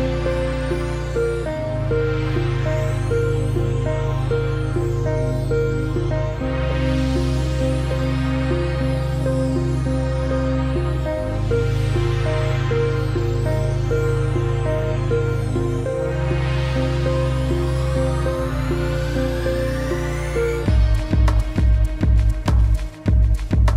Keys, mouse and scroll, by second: 2.9 click, 10.0-10.3 alt+scroll up 1, 10.8 space, 10.9 click, 11.2 space, 11.5-11.8 alt+scroll up 2, 11.8 space, 11.9 click, 12.2 space, 12.6-13.0 alt+scroll up 1, 14.5 click, 19.5 click.